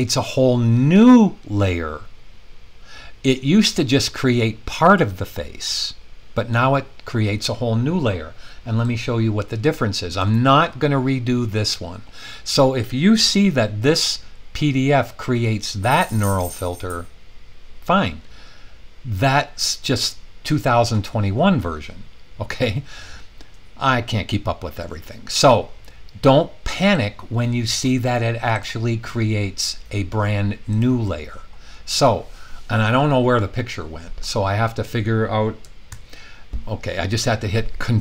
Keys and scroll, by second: 35.9 super+0.